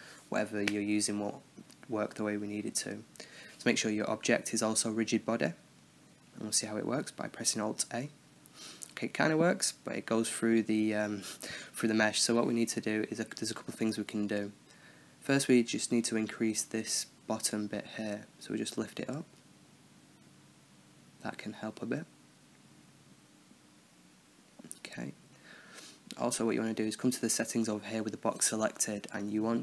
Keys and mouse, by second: 0.9 right click, 1.4-3.0 middle drag, 3.0-4.3 drag, 5.5 alt+a, 7.9-10.5 middle drag, 10.5-12.7 drag, 16.0-17.7 drag, 16.5 right click, 17.2 Tab, 18.6-20.6 middle drag, 20.6-21.8 drag, 21.8-22.9 middle drag, 23.1-24.7 middle drag, 24.1 Tab, 24.9-26.2 middle drag, 27.9-29.6 middle drag.